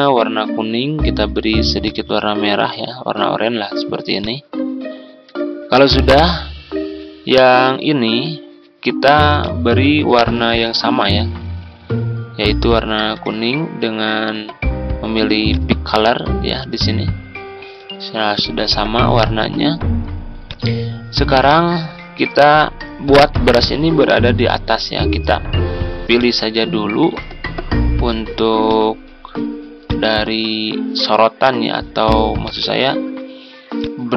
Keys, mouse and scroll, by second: 4.8 ctrl+scroll down 1, 5.4 scroll up 1, 6.5-6.9 scroll down 1, 7.9-8.2 ctrl+scroll down 1, 9.3 click, 12.2 ctrl+scroll up 1, 12.8-13.9 ctrl+scroll up 1, 15.5 click, 17.9-19.0 scroll up 1, 19.0 scroll down 1, 20.4 click, 20.9-21.3 ctrl+scroll down 1, 21.9 click, 23.3 Home, 24.4 click, 27.8-34.1 drag.